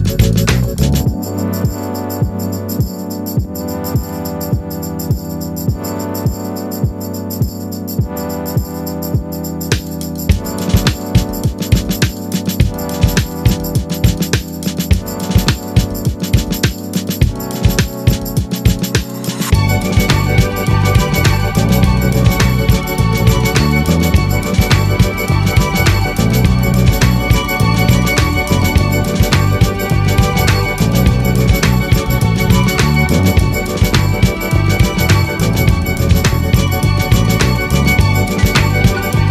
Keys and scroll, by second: 39.1 ctrl+a.